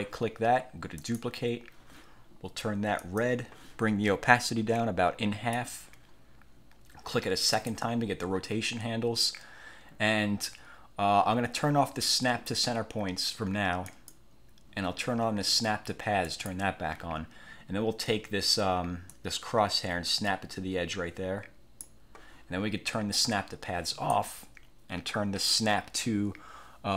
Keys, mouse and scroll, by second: 1.1 click, 3.1 click, 4.6-5.8 drag, 7.6 click, 14.0 click, 16.4 click, 19.2-22.2 drag, 24.0 click.